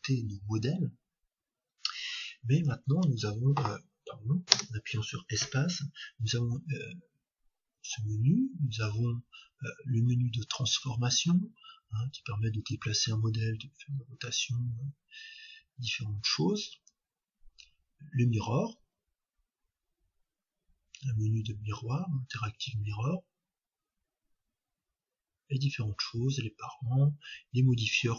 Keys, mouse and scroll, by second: 2.9 shift+a, 4.5 space.